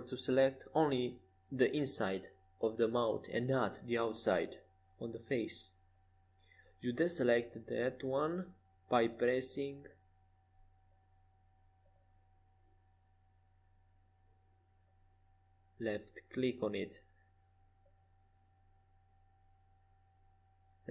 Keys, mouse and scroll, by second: 3.4-4.8 middle drag, 4.8 c, 8.4-10.3 right drag, 11.4 c, 16.1-17.9 middle drag, 19.0 c.